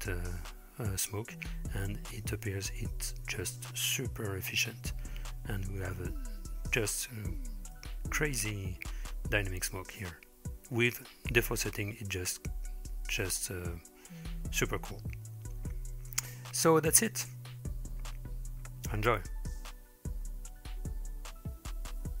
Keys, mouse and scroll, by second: 13.6-15.2 middle drag, 15.9-16.8 middle drag, 19.8-22.2 middle drag.